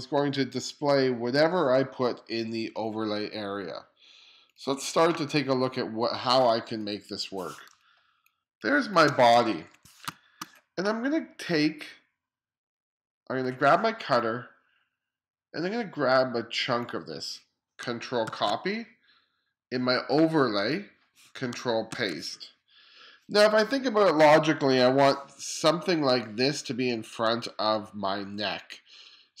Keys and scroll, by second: 7.8 space, 9.4 2, 10.1 space, 18.3 super+c, 22.0 super+v.